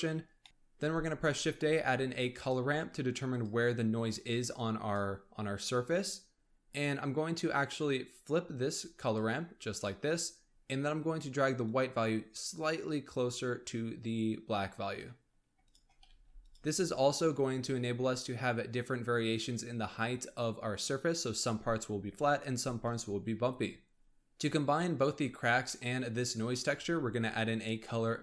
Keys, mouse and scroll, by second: 0.2 scroll down 3, 0.4 middle click, 0.8 shift+a, 4.3-6.3 drag, 6.3-7.5 scroll up 3, 7.5-14.6 drag, 15.3-15.6 scroll down 1, 15.6 shift+click, 16.0 g, 17.4-20.4 scroll up 1, 20.4 scroll up 2, 24.4-25.6 scroll down 2, 25.6 middle click, 26.4 scroll up 1, 26.7 shift+a.